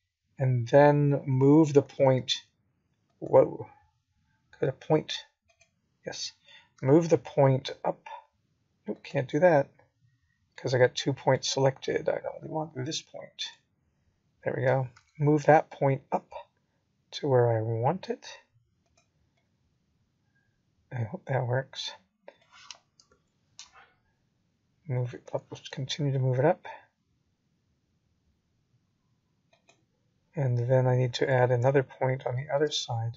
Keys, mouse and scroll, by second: 5.6 ctrl+v, 16.2 right click, 18.6-19.2 scroll down 3, 20.3 g, 24.0 click, 25.2 g, 28.1-28.7 scroll down 2, 29.0 middle click, 31.9 click.